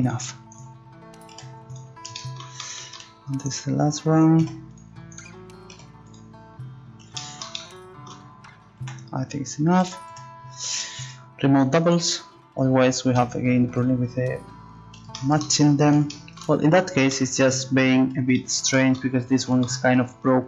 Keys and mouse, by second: 1.3 g, 3.9 click, 4.4 g, 5.7 g, 8.8 z, 9.8 a, 10.1 a, 11.8-13.6 drag, 13.2 u, 16.3 middle click.